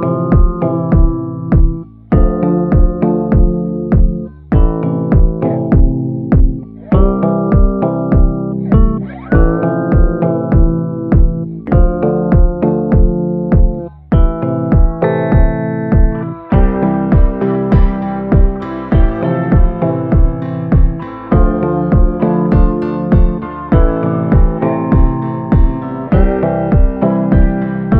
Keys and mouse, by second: 1.3 ctrl+z, 1.3 b, 2.9 b, 4.1 shift+b, 5.5 click, 6.3 ctrl+z, 6.6-7.9 drag, 7.9 b, 9.7 b, 15.6 click, 16.2 click, 17.0 click, 17.7 click, 18.0 click, 18.3 click, 18.7 click, 19.6-20.6 drag, 20.9 click, 21.8 ctrl+z, 22.3 click, 23.2 click, 26.5 click, 26.7 click, 27.8 click.